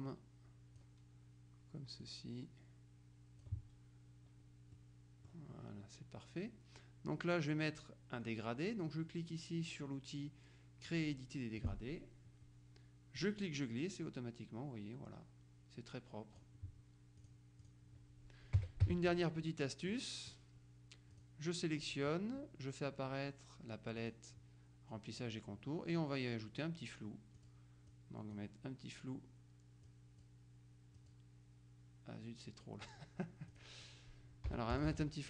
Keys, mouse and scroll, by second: 2.1-4.0 drag, 4.8-5.9 middle drag, 11.7 click, 13.2-17.0 drag, 17.3 click, 18.6 KP_Subtract, 20.0 middle click, 21.2 click, 24.1 click, 27.4 click, 30.0 click, 31.1 click, 33.6 click, 34.6 Delete, 34.9 BackSpace.